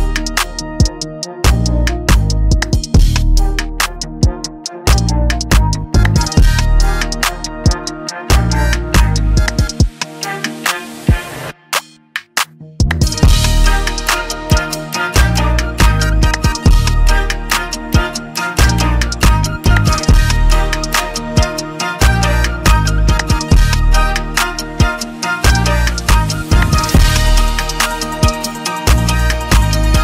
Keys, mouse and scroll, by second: 1.2 click, 2.4 click, 5.0 click, 5.0 m, 6.1 click, 6.1 right click, 8.4 click, 10.4 click, 13.9 click, 17.6 click, 20.5 click, 21.5 click, 22.7 click, 22.7 typing, 23.8 F8, 23.8 click, 26.8-27.6 typing, 29.0 BackSpace, 29.4 BackSpace.